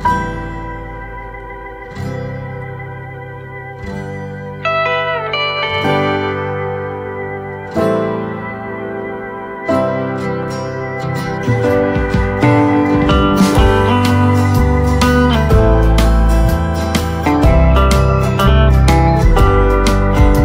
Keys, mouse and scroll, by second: 1.3-1.6 scroll down 1, 5.5 click, 7.5-7.8 scroll down 1, 7.8 right click, 8.9 shift+click, 10.9 click, 12.5 right click, 13.6 click, 15.9-17.2 typing, 19.1 click.